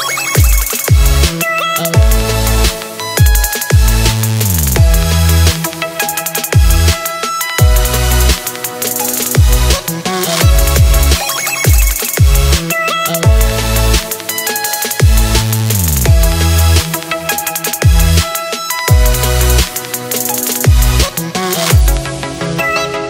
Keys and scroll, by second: 2.4 super+b, 18.4 space, 18.9 space, 19.0 space, 19.1 space.